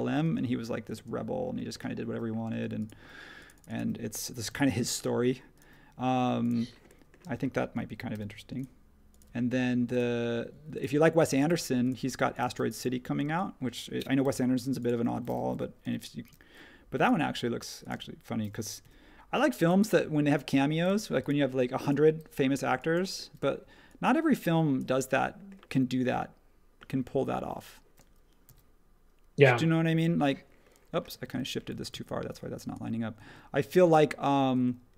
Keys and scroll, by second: 0.2 space, 0.9 space, 2.5 space, 4.5 m, 7.2 space, 8.1 |, 9.2 ⟲, 10.5-14.2 typing, 15.8 r, 17.9 space, 18.8 |, 20.8 super+z, 22.0 e, 28.4 r, 31.2 super+z, 31.7 super+z, 31.9 super+z.